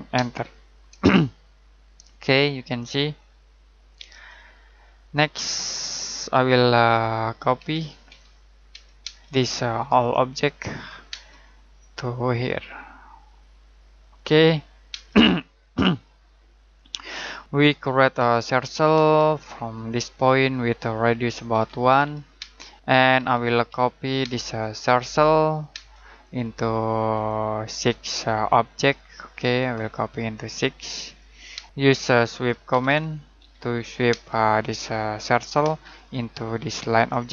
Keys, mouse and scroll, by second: 0.1 space, 4.4 middle click, 5.1-6.0 scroll up 1, 6.0-6.4 scroll down 1, 6.4 middle click, 7.5-9.0 typing, 9.9 click, 11.0 space, 11.3 middle click, 12.0 click, 14.9 space, 15.3 middle click, 16.1 scroll up 1, 16.6 middle click, 18.1 c, 18.9 space, 19.7 click, 21.5-24.2 typing, 24.5 click, 25.7 space, 26.1 click, 31.5-34.0 typing, 35.1 click, 35.6 space, 36.9 click.